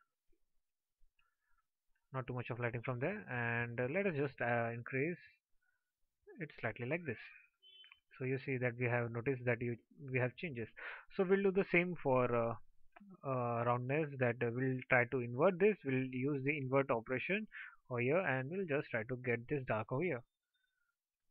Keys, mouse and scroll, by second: 21.2 alt+click.